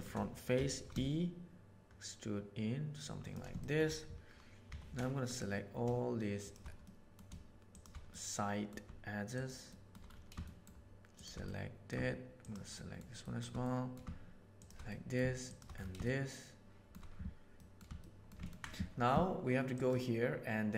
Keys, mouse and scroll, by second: 0.5 e, 3.6 shift+middle click, 4.6 3, 5.2 click, 6.8 middle click, 8.0 middle click, 9.6 shift+middle click, 10.5 shift+middle click, 11.4 middle click, 12.7 shift+middle click, 13.2 shift+middle click, 13.6 middle click, 14.8 middle click, 15.9 shift+middle click, 17.5 middle click, 17.9 shift+middle click, 18.4 ctrl+middle click, 19.8-20.7 right drag.